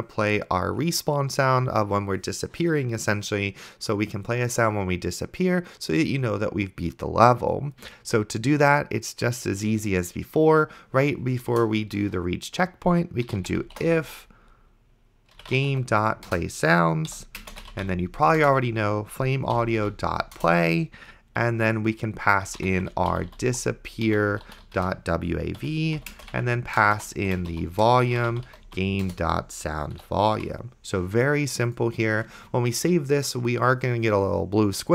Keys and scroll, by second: 11.8 Return, 13.0-14.0 typing, 15.1-16.3 typing, 16.3 Return, 17.1 End, 17.4-20.3 typing, 20.4 Return, 21.4-29.2 typing, 25.6 Right, 30.0 End, 30.4 ;, 32.8 ctrl+s.